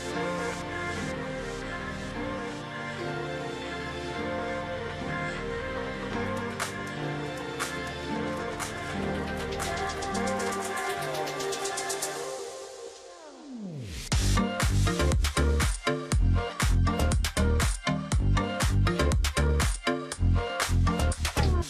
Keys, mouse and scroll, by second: 0.6 ctrl+click, 1.7 space, 2.7 shift+x, 3.4 ctrl+click, 3.5 ctrl+space, 4.2-4.6 alt+scroll down 1, 4.6 ctrl+click, 4.8-5.5 alt+scroll up 1, 5.5 ctrl+click, 6.6-7.0 alt+scroll down 1, 7.0 space, 7.4-9.6 alt+scroll up 1, 9.6 space, 11.4 alt+click, 12.5 space, 17.1 shift+x, 17.3 ctrl+click, 17.5 alt+scroll down 1, 17.8-18.2 alt+scroll up 1, 18.2 space.